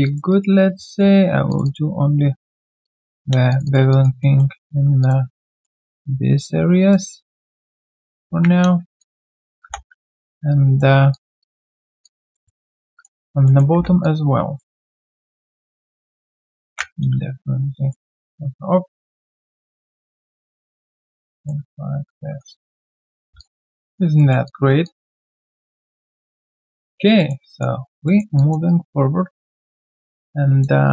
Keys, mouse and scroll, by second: 0.0 alt+click, 0.3 alt+right click, 1.6 double click, 2.2 right click, 3.5 shift+click, 3.6 shift+double click, 3.9 alt+click, 4.2 alt+middle click, 5.0 shift+click, 5.9 ctrl+right click, 8.3 ctrl+b, 9.0 alt+click, 9.3 alt+middle click, 10.0 3, 10.4 alt+click, 10.5 right click, 11.7 alt+scroll down 1, 12.0 alt+click, 12.3 alt+middle click, 12.6 alt+click, 13.2 alt+right click, 13.4 alt+middle click, 13.7 alt+1, 14.0 alt+click, 14.7 right click, 15.1 q, 15.6 double click, 20.6 alt+click, 21.2 alt+middle click, 22.3 3, 22.7 right click, 23.6 scroll down 1, 23.8 alt+click, 24.1 alt+middle click, 24.4 alt+click, 27.1 alt+middle click, 27.5 alt+click, 27.7 alt+right click, 28.0 alt+middle click, 28.3 alt+click, 28.6 alt+right click, 29.6 alt+middle click, 30.2 alt+click, 30.8 alt+right click.